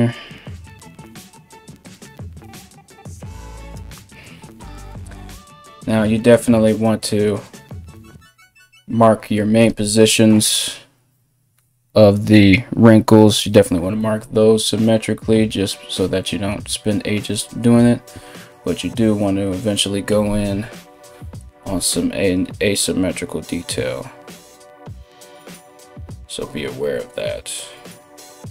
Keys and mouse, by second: 20.2 KP_1.